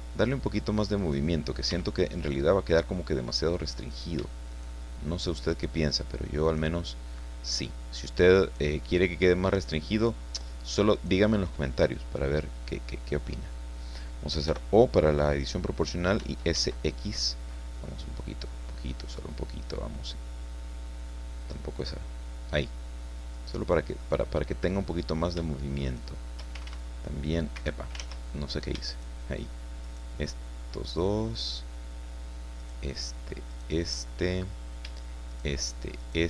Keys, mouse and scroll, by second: 1.0 right click, 1.7 x, 2.3 click, 3.9 shift+right click, 4.5 shift+right click, 5.5 shift+right click, 6.4 shift+right click, 7.5 shift+right click, 8.4 shift+right click, 10.0 shift+right click, 10.9 shift+right click, 14.4 o, 16.2 s, 16.6 x, 17.1-18.1 scroll up 4, 18.5-19.0 scroll up 4, 21.8 click, 22.3 scroll down 2, 22.5-24.2 middle drag, 24.3 scroll up 2, 25.8 shift+right click, 26.6 ctrl+shift+x, 27.5 Escape, 28.9 shift+right click, 29.8 shift+right click, 32.6 shift+right click, 33.5 shift+right click, 34.0-34.5 shift+scroll up 3, 35.3 shift+right click, 36.0 shift+right click.